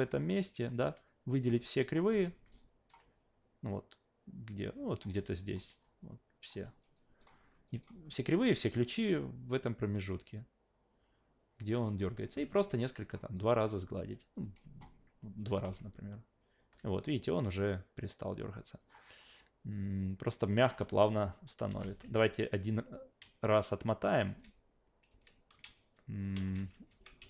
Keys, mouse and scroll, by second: 1.4-1.9 drag, 2.1 f, 2.6-2.9 alt+right drag, 3.7 click, 5.5 click, 5.8 click, 6.9 alt+right drag, 7.3 alt+middle drag, 7.7 alt+right drag, 7.9 alt+middle drag, 8.9-11.8 drag, 13.0 click, 13.3 click, 15.4 click, 16.9 click, 18.8 click, 20.6 click, 20.9 alt+right drag, 21.1-21.6 alt+drag, 21.6 alt+v, 22.1 ctrl+z, 23.2 ctrl+z, 24.2 ctrl+z, 25.1 ctrl+z, 25.8 shift+z, 26.6 ctrl+z, 26.9 ctrl+z.